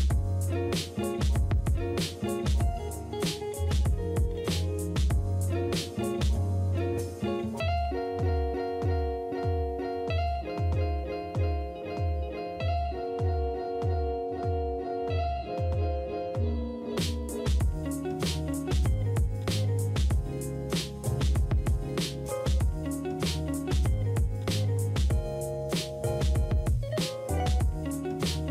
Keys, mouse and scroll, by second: 1.0-4.8 typing, 10.8 typing.